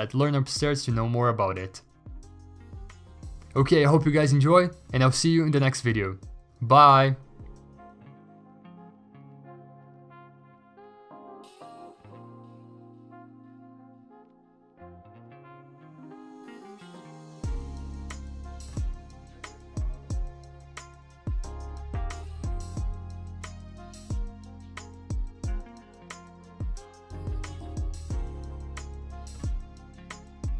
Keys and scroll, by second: 1.1 ctrl+alt+g, 2.6 ctrl+z, 3.9 ctrl+a, 4.1 Delete, 5.0 ctrl+d, 5.6 b, 6.4 b, 7.6 b, 8.9-10.4 typing, 11.8 ctrl+t, 14.1 v, 14.8 v, 16.7 m, 17.5 ctrl+d, 18.3 ctrl+d, 18.3 v, 19.2 ctrl+t, 21.6 ctrl+t, 24.8 ctrl+e, 25.7 b, 27.6-28.0 x, 28.8 0, 29.9 3.